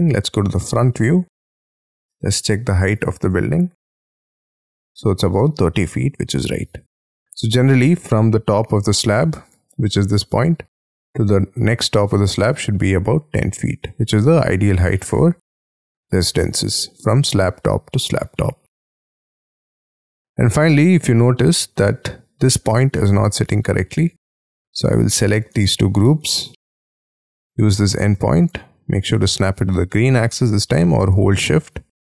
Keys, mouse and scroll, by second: 0.3 alt+2, 1.2-1.8 scroll up 9, 1.8 t, 7.3-8.1 scroll up 4, 8.1-9.4 scroll up 4, 9.4 Escape, 10.6-11.0 scroll down 4, 11.0 scroll up 4, 14.6 scroll up 1, 14.6 space, 14.7-16.7 scroll down 4, 16.7-18.7 scroll down 5, 18.7 Escape, 18.9 Escape, 19.4 middle click, 20.4 middle click, 20.9 middle click, 21.8-22.4 scroll up 5, 22.6 scroll up 1, 22.9 scroll down 1, 26.0 scroll down 1, 26.2 m.